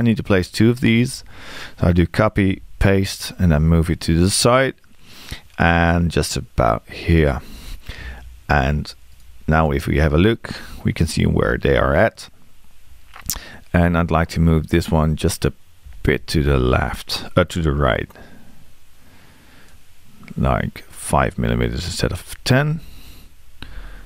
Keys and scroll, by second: 15.9 m, 22.7 5.